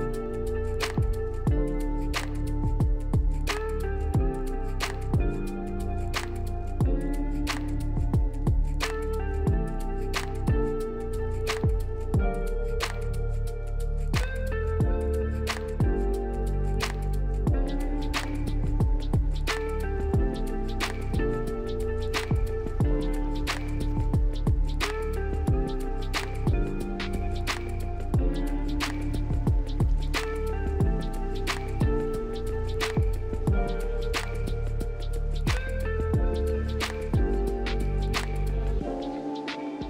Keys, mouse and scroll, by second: 2.5 middle click, 3.5 Delete, 4.3 scroll down 1, 11.6 scroll up 1, 22.4 middle click, 23.4 middle click, 24.1 Delete, 25.1 middle click, 25.6-26.0 scroll down 2, 26.9-28.1 scroll up 1, 32.3 double click, 33.1 3, 33.2 Tab, 33.3 3, 33.9 Return, 38.8 middle click.